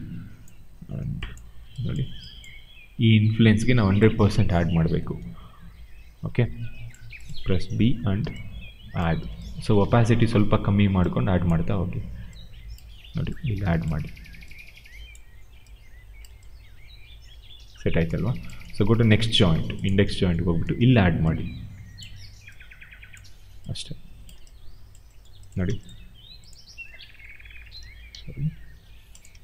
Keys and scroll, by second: 8.1 b, 25.5 w, 26.9 e, 27.7 ctrl+z, 28.0 q.